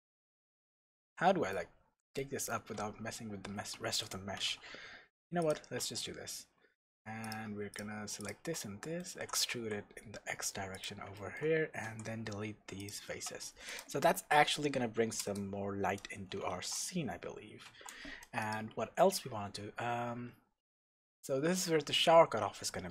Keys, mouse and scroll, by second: 0.6 scroll up 1, 1.1-5.5 shift+middle drag, 1.7 scroll down 1, 2.7 g, 3.9 Escape, 4.3 g, 5.5 click, 5.8 Tab, 7.2 click, 7.7 shift+click, 8.2 shift+click, 8.5-10.8 middle drag, 9.1 e, 10.8 click, 11.1-13.1 shift+middle drag, 11.8 x, 13.1 Tab, 13.7 click, 15.2 KP_0, 16.6 shift+z, 18.4 click, 18.7 Tab, 20.3-20.6 scroll down 1, 20.6 scroll up 1, 21.1-22.9 middle drag, 22.4-22.9 scroll down 1.